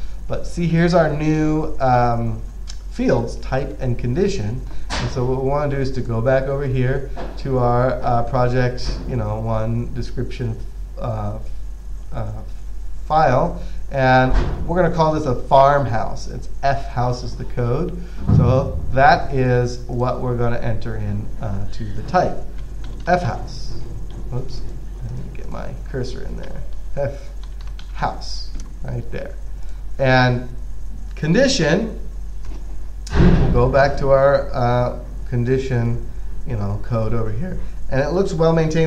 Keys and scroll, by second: 22.7-24.1 typing, 26.8-28.8 typing.